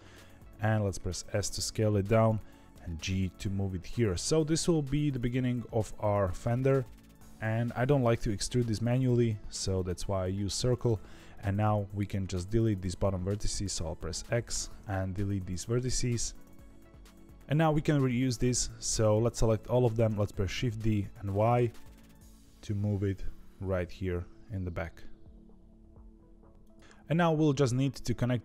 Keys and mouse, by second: 0.1 s, 2.7 g, 4.0 s, 5.4 g, 11.4 click, 15.5 shift+middle click, 20.5 shift+d.